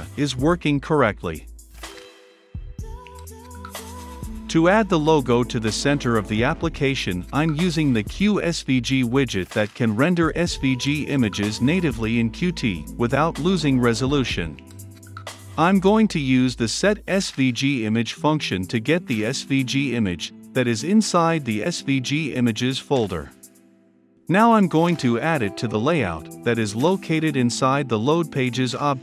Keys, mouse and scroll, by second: 2.2 Return, 2.3-4.2 typing, 3.2 Return, 3.7 Return, 4.3 Return, 5.2 shift+9, 7.1 s, 8.0 Return, 9.6 >, 10.7 Return, 12.0 shift+f, 12.2 u, 12.3 n, 12.9 Return, 13.5 >, 13.6 s, 13.9 t, 15.1 Down, 16.2-16.6 scroll, 16.6-17.5 drag, 17.6 ctrl+space, 18.0 Down, 19.0 Return, 19.4-24.3 typing, 20.8 Right, 21.1 Return, 22.3 Return, 22.6 Return, 23.5 Return, 23.9 Return, 25.0 Return, 26.6-28.1 drag, 28.1 >.